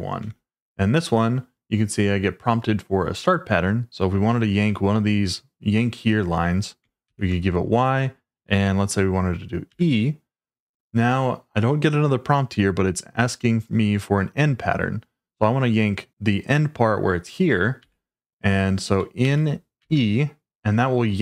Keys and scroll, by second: 0.2 Return, 7.0 shift+y, 9.7 e, 17.8 e, 19.2 n.